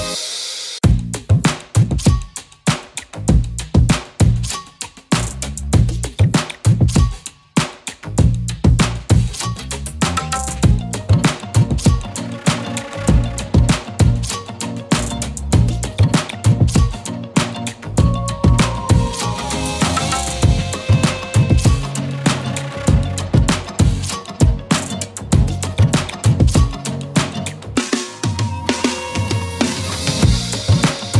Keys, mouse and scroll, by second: 0.1 ctrl+d, 3.6 shift+click, 5.3-6.5 scroll up 1, 8.8-10.0 drag, 11.6-12.8 shift+drag, 25.0 alt+click, 28.2 scroll up 1, 28.5 z, 28.9 click, 29.0 space, 29.1 click, 29.3 z, 29.4 click, 29.7 space, 29.8 click.